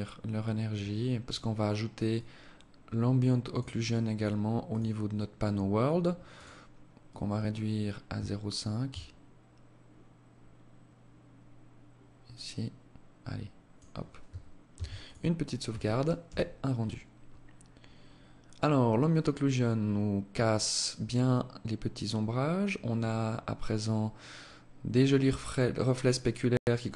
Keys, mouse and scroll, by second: 0.5 right click, 1.4 click, 4.0 click, 5.7 click, 6.4 click, 14.1 ctrl+s.